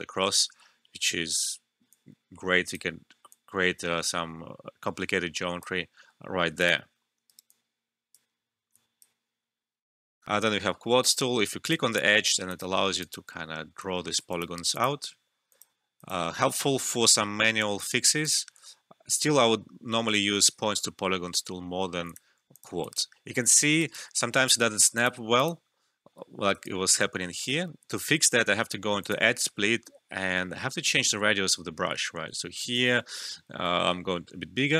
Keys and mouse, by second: 1.9-6.6 drag, 1.9 typing, 5.8 typing, 7.2 alt+right click, 7.5 alt+click, 10.2 alt+F12, 11.6 click, 13.0 typing, 20.3 ctrl+z, 22.0 click, 23.5 alt+middle click, 23.8 alt+right click, 24.9 click, 26.5-26.9 typing, 26.6 alt+right click, 27.1 alt+middle click, 29.0 click, 30.6 [, 31.8-33.0 typing.